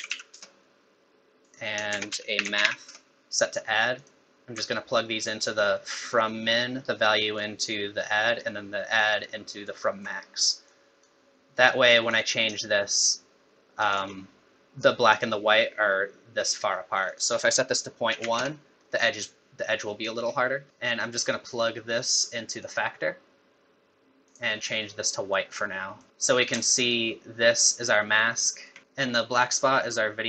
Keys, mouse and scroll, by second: 1.9 shift+a, 4.7 alt+right click, 6.8 alt+right click, 8.4 alt+right click, 10.7 click, 12.1 click, 17.1 click, 20.6-21.1 scroll down 5, 20.7 middle click, 20.7 click, 20.7-21.1 scroll up 2, 24.3 click, 26.1 middle click, 26.9 ctrl+shift+click.